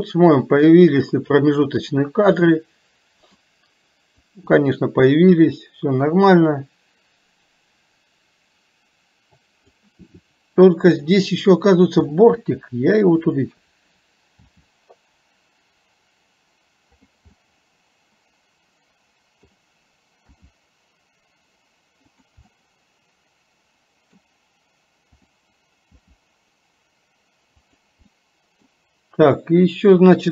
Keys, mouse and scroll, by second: 0.6-1.9 drag, 2.5-3.5 middle drag, 4.5-9.8 drag, 11.1 middle click, 13.4 click, 17.5-19.6 middle drag, 22.6 scroll up 1, 22.7-24.2 middle drag, 24.2 scroll down 1, 28.1 scroll up 1, 28.2 middle click.